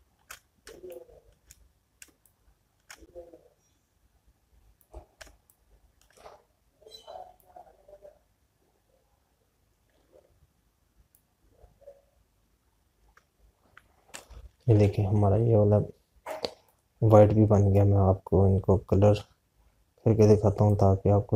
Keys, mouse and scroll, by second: 1.5 space, 3.1 click, 3.4 space, 9.0 click, 19.4 click.